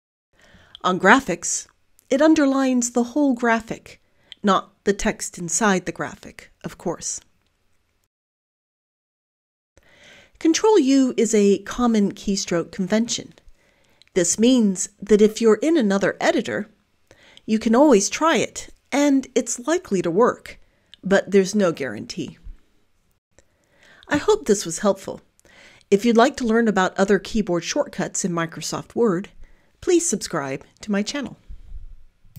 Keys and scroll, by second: 2.5 ctrl+u, 12.1 ctrl+u, 15.9 ctrl+u, 20.7 ctrl+u, 24.4 ctrl+u.